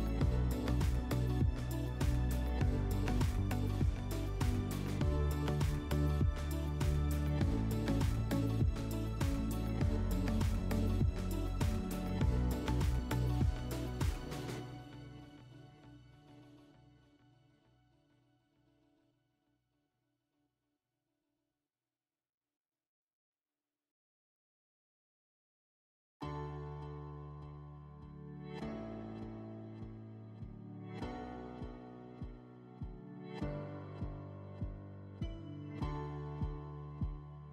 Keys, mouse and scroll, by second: 2.6 click, 9.7 click, 10.3-11.5 drag, 12.2-13.3 typing, 15.0-18.9 drag, 28.3 click, 28.4 click, 29.0-30.1 typing.